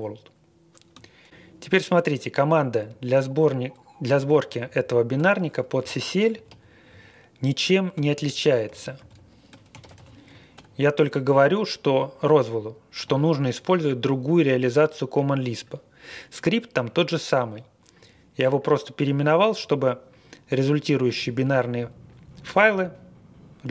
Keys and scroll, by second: 1.8 Up, 2.8 Up, 4.3 Home, 4.5 Home, 4.7 Home, 4.8 Home, 5.1-6.4 typing, 6.9-7.5 Left, 7.5-10.5 typing, 11.4-11.8 Left, 11.6-12.3 typing.